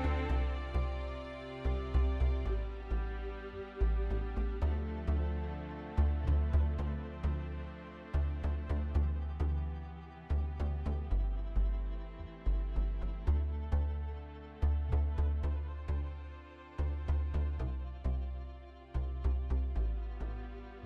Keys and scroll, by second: 2.6 ctrl+v, 13.1-14.4 typing.